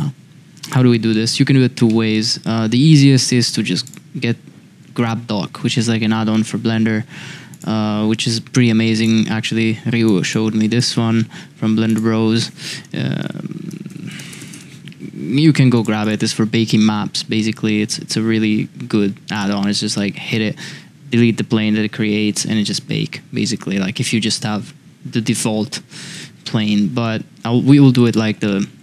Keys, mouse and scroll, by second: 0.7 click, 1.1-1.4 middle drag, 1.9 middle drag, 3.8 click, 7.5-9.1 drag, 26.1 n, 27.0-27.3 middle drag, 28.4 middle drag.